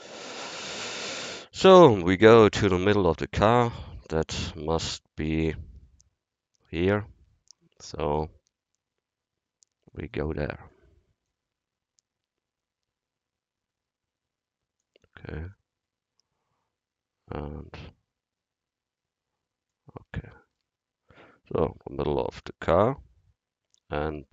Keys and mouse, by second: 0.0-1.7 drag, 1.7 middle click, 2.7-3.6 drag, 4.7 shift+c, 9.9-13.2 drag, 15.6-19.1 drag, 20.3-22.3 middle drag.